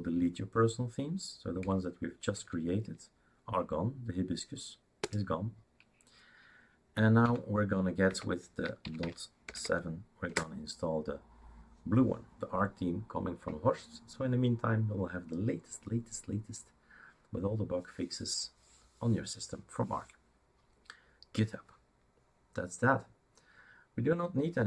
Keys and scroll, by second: 1.7 6, 2.3 Tab, 5.1 Return, 7.3 Up, 8.1 Down, 8.6-9.9 typing, 10.3 Return.